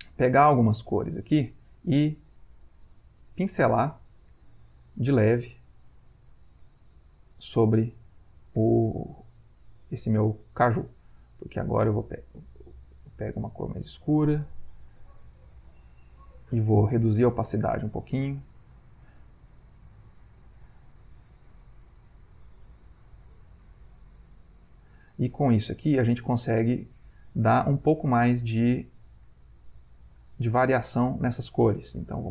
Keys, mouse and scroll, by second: 0.6 ctrl+click, 1.8 shift+click, 2.4-3.5 drag, 4.3 click, 6.0 ctrl+click, 6.8-7.9 drag, 8.9 click, 12.4 ctrl+click, 13.9 ctrl+click, 14.3 ctrl+click, 15.6 shift+click, 16.9 i, 17.6 click, 18.5-21.1 drag, 23.1-25.1 ctrl+drag, 27.4 ctrl+click, 30.8 ctrl+click.